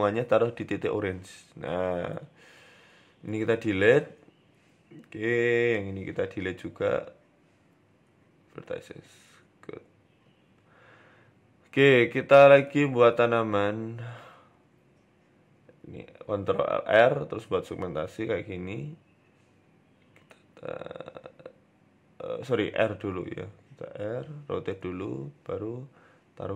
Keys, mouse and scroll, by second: 0.4 Tab, 0.9 g, 2.0 right click, 2.7 Delete, 5.3 right click, 5.6 Tab, 5.9 a, 6.1 a, 7.2 l, 7.9 Delete, 8.9 click, 9.9 a, 11.4 shift+d, 13.4 shift+middle click, 15.0 ctrl+r, 17.4 click, 18.5 click, 19.5 g, 24.9 right click, 25.5 ctrl+z, 26.1 g.